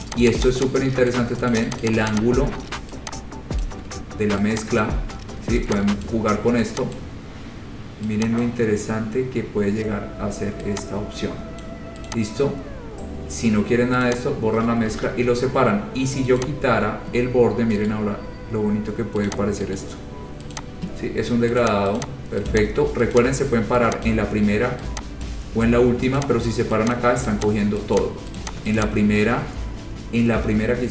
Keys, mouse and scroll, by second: 0.1 click, 0.3 click, 0.5 click, 0.6 click, 1.3 click, 1.8 click, 1.9 click, 2.1 click, 2.2 click, 2.5 click, 3.8 click, 5.0 click, 6.2 click, 7.2 click, 8.6 click, 11.8 click, 12.3 click, 14.3 click, 15.1 ctrl+z, 16.6 click, 18.1 right click, 19.5 click, 20.0 right click, 20.8 click, 21.2-21.6 scroll down 4, 21.8 click, 22.2 click, 22.7 click, 22.9 scroll up 3, 23.4 click, 24.3 click, 25.5 click, 26.0 scroll, 26.4 click, 27.2 click, 27.7 click, 28.2 click, 28.6 click, 29.0 click.